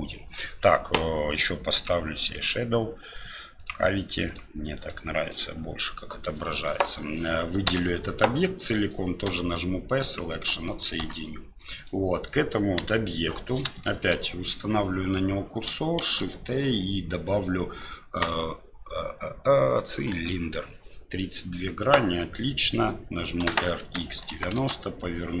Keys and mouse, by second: 0.3-5.1 drag, 5.3-6.7 middle drag, 9.2 l, 10.1 p, 10.7 middle click, 11.0 Tab, 11.7 right click, 12.8 KP_1, 13.8 shift+middle click, 16.0 shift+a, 23.4 r.